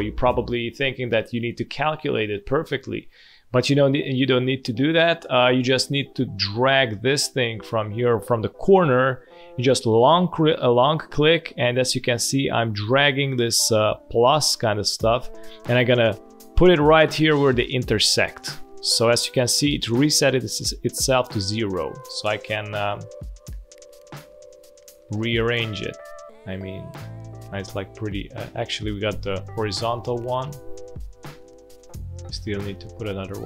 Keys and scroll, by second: 2.8 space, 3.8 alt+space, 4.3 space, 5.4 space, 29.9 space.